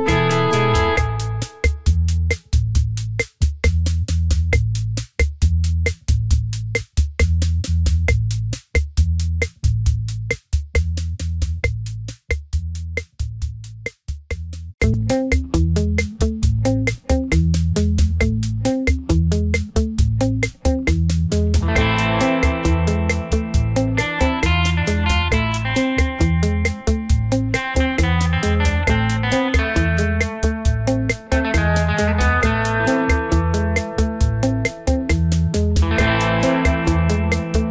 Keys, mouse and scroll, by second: 2.2 middle click, 6.1 click, 6.6 shift+d, 8.2 click, 8.7 click, 9.9 click, 12.1 click, 13.3 KP_1, 14.0 KP_3, 14.5 click, 16.2 middle click, 18.0 click, 18.9 middle click, 20.2 KP_3, 21.2 click, 22.1 middle click, 22.8 KP_0, 23.7 n, 24.4 click, 24.8 click, 25.7 click, 26.1 scroll down 3, 26.7 shift+middle click, 27.5 scroll up 2, 27.9 shift+middle click, 29.0 click, 29.4 click, 29.6 Tab, 29.6 click, 30.1 e, 31.0 ctrl+z, 31.6 click, 31.7 click, 32.1 Tab, 32.3 click, 32.9 Tab, 33.1 click, 33.8 click, 34.9 e, 36.3 click, 36.8 ctrl+b.